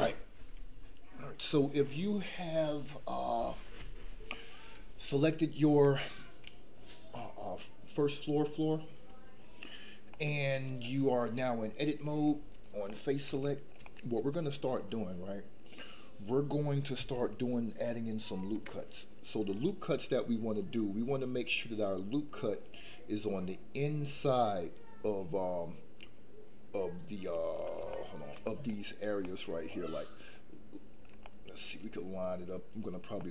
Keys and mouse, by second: 10.1 middle click, 12.9-15.6 middle drag, 18.4 ctrl+r, 27.9 shift+middle click, 28.6 middle click, 29.3-30.4 middle drag, 31.2 shift+middle click, 33.2-33.3 middle drag.